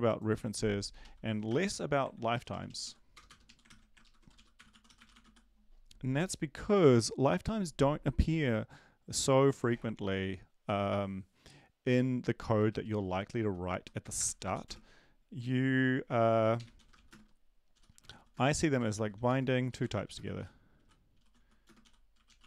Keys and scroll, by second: 1.6 Right, 1.6 shift+Home, 2.1 ctrl+c, 2.3 Down, 2.5 Down, 2.6 Down, 3.1 Down, 3.1 Return, 3.2 Return, 3.4 Up, 3.7 ctrl+v, 4.3 ctrl+shift+Left, 4.6-5.7 typing, 16.2-22.4 typing.